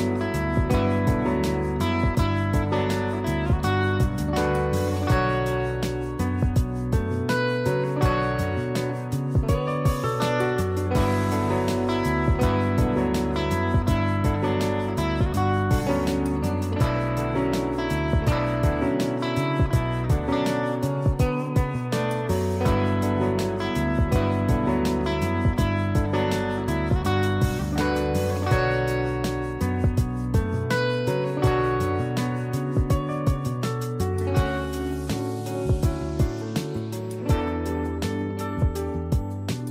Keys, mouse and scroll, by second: 2.4 click, 9.7 click, 12.5 click, 15.3 click, 20.0 space, 20.1 click, 20.5 space, 20.9 click, 24.4 space, 24.6 click, 24.9 space, 25.9 click, 31.7 click, 32.3 space, 32.5 click, 32.8 space, 34.2 click, 34.8 space, 35.0 click, 35.4 space, 36.4 click, 38.6 ctrl+j.